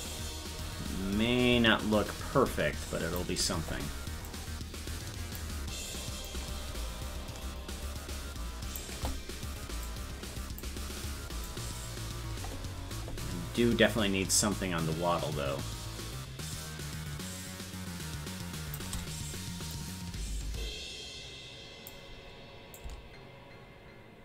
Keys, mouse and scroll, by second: 4.3-5.4 drag, 6.3-8.8 drag, 9.9 click, 11.5-18.8 drag, 19.8-21.9 drag, 22.8-24.2 drag.